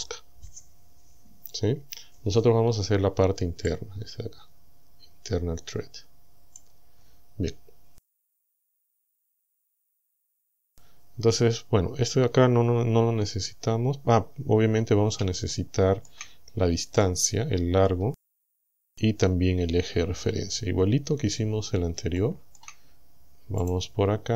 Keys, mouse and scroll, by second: 3.7-6.8 drag, 8.3 click, 10.0 click, 15.5 shift+click, 16.5 shift+scroll up 3, 17.0-18.1 middle drag, 20.0 Tab, 22.2 shift+middle click, 23.7 click, 24.1-24.3 scroll up 1.